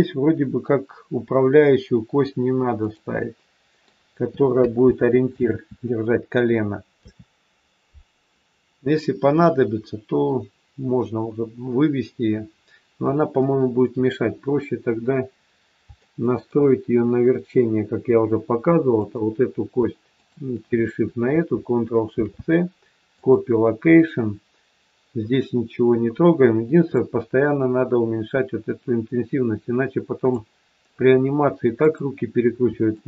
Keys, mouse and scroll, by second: 3.1 middle click, 4.9 ctrl+z, 5.4 ctrl+z, 6.9 KP_3, 8.7-9.6 scroll up 1, 9.6-10.0 scroll up 1, 12.5-14.4 scroll down 2, 14.4-15.5 scroll up 2, 15.5 scroll down 1, 16.0 shift+middle click, 19.0 click, 20.2 shift+click, 22.1 ctrl+shift+c, 26.9 click, 31.7 click, 32.9 shift+click.